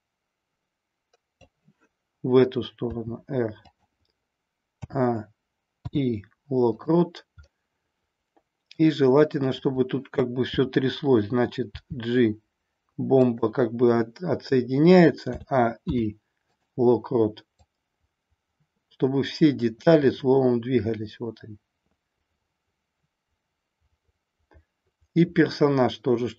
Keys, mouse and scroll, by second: 2.8 r, 3.7 click, 4.7 a, 5.8 i, 7.4-8.7 middle drag, 9.6-10.8 drag, 11.7 g, 13.3 click, 15.2 a, 15.8 i, 17.7-26.3 drag, 17.8 typing.